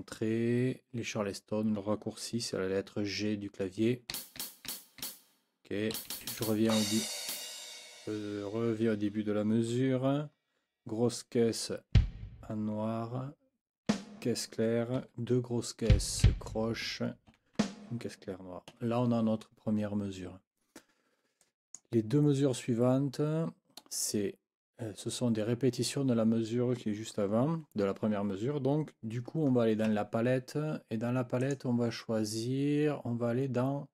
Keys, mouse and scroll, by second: 4.1 g, 5.9 Left, 6.7 Left, 7.3 Right, 11.9 b, 13.9 a, 15.0 KP_4, 15.9 b, 17.3 5, 17.6 a, 18.7 Escape, 21.4 click, 29.9 F9, 31.4 click.